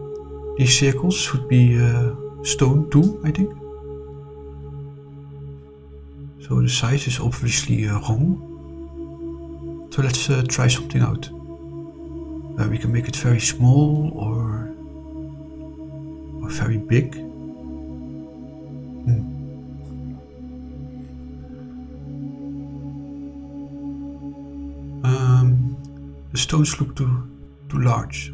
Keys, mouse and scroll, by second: 0.8 click, 2.4 scroll up 4, 3.1 scroll down 4, 5.8 click, 6.4 click, 9.9 click, 10.6-19.6 drag, 21.0 click, 22.5-23.0 middle drag, 23.3 scroll up 2, 26.0 click, 27.1-28.0 drag.